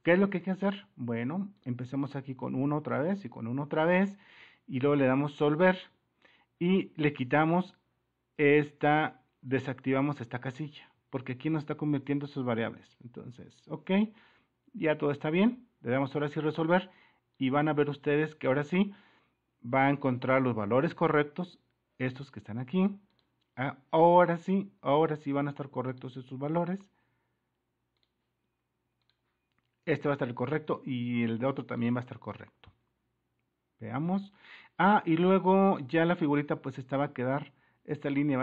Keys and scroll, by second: 2.4 1, 2.6 Return, 3.1 1, 3.2 Return, 11.1 super++, 11.1 super+-.